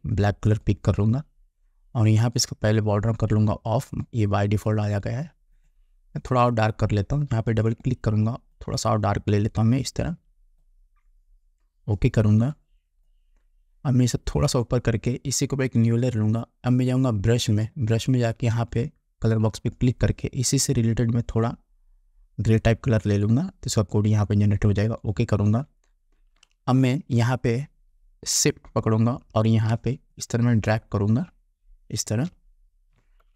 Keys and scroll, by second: 28.0 ctrl+a.